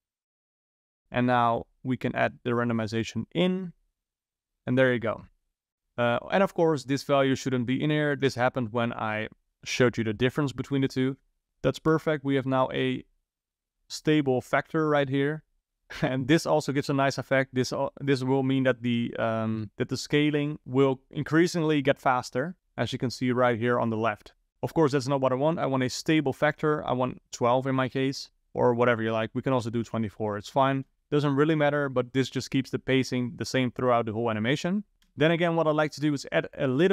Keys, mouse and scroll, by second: 1.6 click, 3.0 click, 6.7 click, 12.0 space, 16.0 click, 18.7 shift+Left, 19.5 space, 25.0 space, 26.1 click, 28.7-30.6 drag, 30.6 shift+Left, 30.9 space, 34.9 space, 35.2 space, 35.9-36.6 middle drag, 36.6 click.